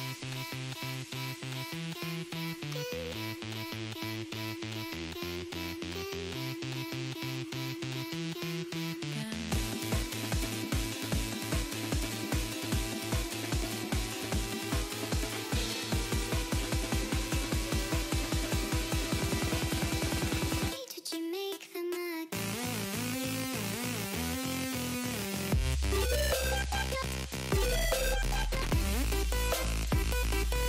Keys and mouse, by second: 0.1 click, 0.5 click, 1.6 click, 2.0 click, 2.2 click, 2.7 click, 3.8 click, 5.3 click, 5.6 click, 7.1 click, 8.8 click, 12.3 click, 12.6 click, 15.0 click, 16.2 alt+click, 18.5 Return, 19.4 ctrl+shift+], 20.2 click, 23.7 click, 24.5 click, 25.3 click, 26.3 click, 27.7 click, 28.3 click, 29.5 click, 30.4 click.